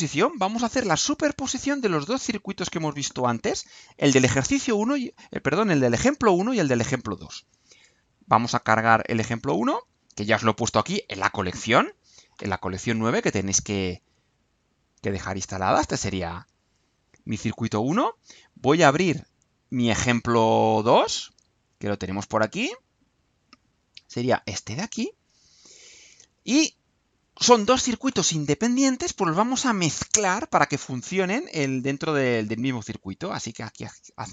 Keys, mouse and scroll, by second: 1.7 click, 11.3 click, 13.5-16.0 drag, 16.8-17.9 right drag, 18.3 click, 22.6 click, 24.7-27.3 drag, 31.3-33.8 drag.